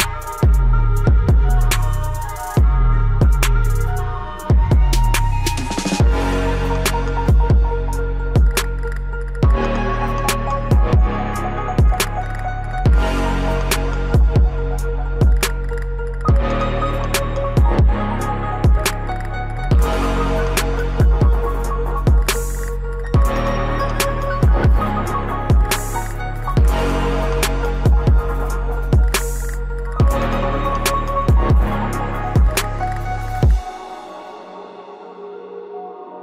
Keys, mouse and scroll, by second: 2.1-17.8 drag, 17.8-19.5 drag, 23.2 click, 24.3 right click, 24.4 click, 24.8 ctrl+shift+q, 27.0-29.8 drag, 29.8 Delete, 30.7 scroll up 1, 32.0-35.9 drag, 35.9 scroll down 1.